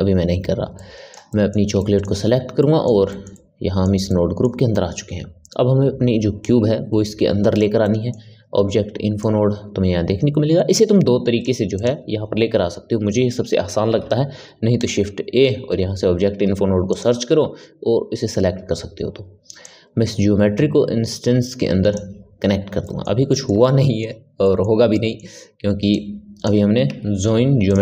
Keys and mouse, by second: 0.7-6.4 middle drag, 6.4 click, 7.8-9.1 middle drag, 9.1 click, 13.9 shift+a, 19.6-22.6 drag, 22.8-25.8 middle drag, 25.8 click, 26.9 shift+a.